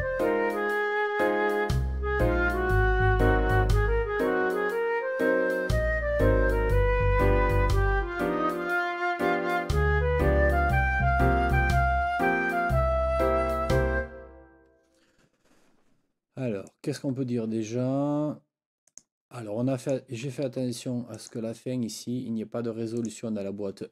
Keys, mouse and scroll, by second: 16.7 click, 18.9 click, 19.8 click, 20.6 ctrl+scroll up 2, 21.2 ctrl+click, 23.0 click.